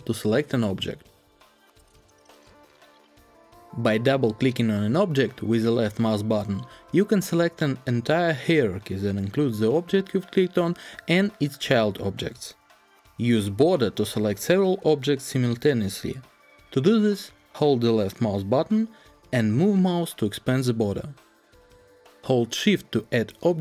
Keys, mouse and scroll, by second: 5.0-11.5 drag, 13.2-19.8 drag.